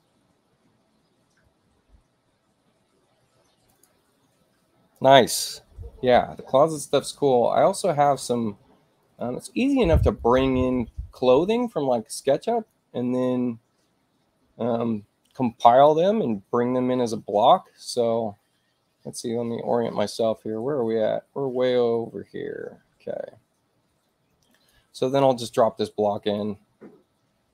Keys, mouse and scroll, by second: 3.6 click, 8.0 click, 8.9 click, 10.1 click, 11.2 scroll down 2, 12.5 click, 15.6 click, 24.4 click, 26.1 click.